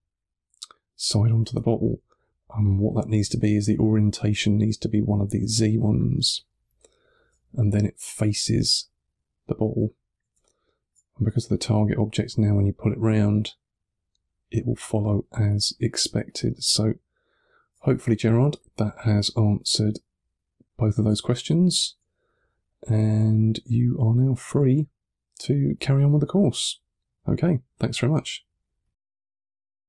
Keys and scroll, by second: 6.1 3, 9.7 1, 10.2 3, 15.3 1, 16.1 3, 17.7 1, 18.4 3, 21.1 1.